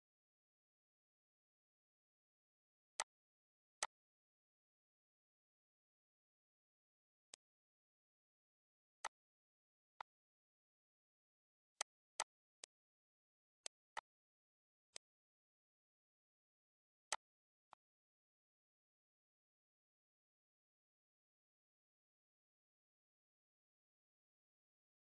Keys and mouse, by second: 1.6 ctrl+x, 2.9 click, 3.7 click, 7.3 click, 8.9 click, 9.9 click, 10.4 ctrl+s, 10.5 ctrl+s, 11.4 click, 11.6 click, 13.5 click, 14.8 click, 16.9 click, 17.6 click, 18.1 ctrl+s.